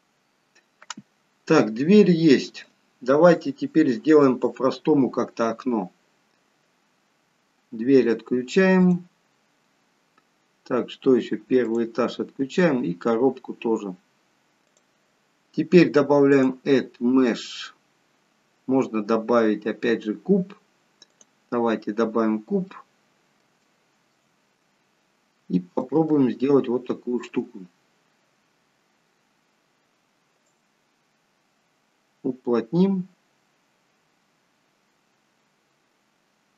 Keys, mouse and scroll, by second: 1.6 middle click, 1.6-2.8 scroll down 3, 6.1-7.0 scroll down 1, 8.7 click, 8.7-9.1 scroll down 1, 11.6 click, 12.6-13.4 scroll down 1, 14.6 click, 14.6-15.8 scroll down 2, 16.2 click, 22.6 middle click, 23.6 shift+middle click, 24.4-25.2 scroll up 2, 25.2 middle click, 26.0 shift+middle click, 27.7-28.4 scroll up 1, 29.1-30.4 scroll up 1, 30.4 click.